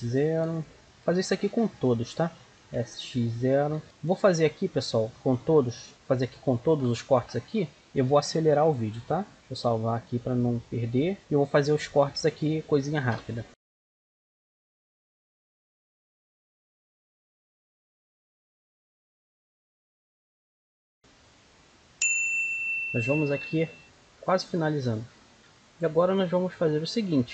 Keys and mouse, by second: 1.3 ctrl+r, 5.1 click, 8.1-11.1 drag, 11.1 middle click, 12.5-13.5 middle drag, 13.5 ctrl+r, 13.7 s, 13.8 s, 14.0 click, 14.2 ctrl+r, 14.3 a, 14.4 right click, 14.4 click, 14.5 middle click, 14.6 ctrl+r, 15.0 ctrl+r, 15.4 s, 15.6 ctrl+r, 15.7 ctrl+r, 15.9 ctrl+r, 16.0 middle click, 16.2 ctrl+r, 16.4 middle click, 16.5-19.9 typing, 16.8 click, 16.8 right click, 17.1 click, 17.2 right click, 17.4 right click, 17.4 click, 17.5 middle click, 17.7 right click, 17.8 click, 18.0 right click, 18.3 right click, 18.5 click, 18.7 middle click, 18.8 ctrl+r, 19.0 middle click, 19.2 middle click, 19.2 click, 19.7 right click, 19.8 click, 20.0 click, 20.3 ctrl+r, 20.6 click, 20.7 ctrl+r, 21.0-22.5 drag, 23.2 ctrl+r, 25.2 ctrl+r, 25.6 ctrl+r.